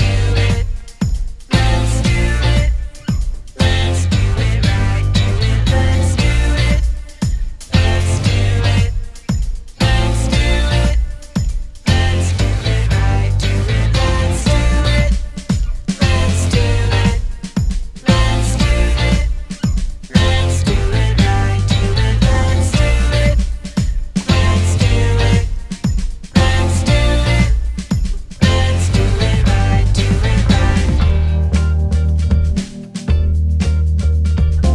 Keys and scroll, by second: 7.4-9.2 typing, 7.5 Return, 11.7 Escape, 13.8 Escape, 14.3 d, 15.2 1, 15.7 Return, 16.7 Escape, 16.9 d, 18.1 Escape, 18.5 ctrl+z, 18.9 Escape, 18.9 d, 19.6 Escape, 20.2 Escape, 20.4 d, 21.2 4, 21.4 Return, 22.8 0, 23.0 Return, 24.5 Escape.